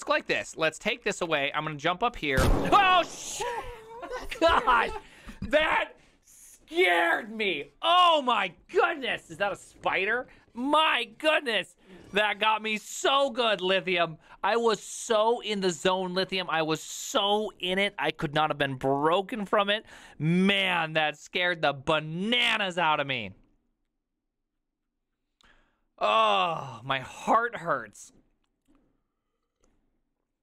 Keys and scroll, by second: 0.0-2.6 typing, 1.9 ctrl+u, 2.0 ctrl+u.